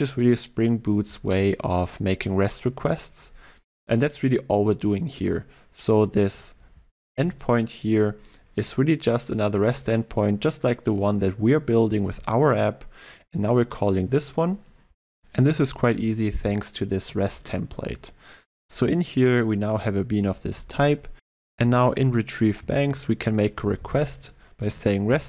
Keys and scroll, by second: 24.7 Return.